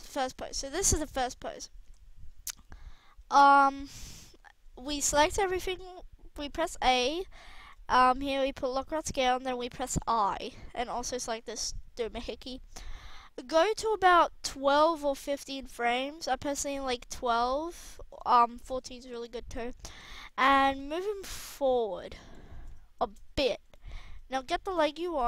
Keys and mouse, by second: 0.3 middle click, 1.0 a, 1.8 KP_1, 4.9 a, 10.0 i, 10.9-14.0 drag, 14.9 click, 19.9 KP_3.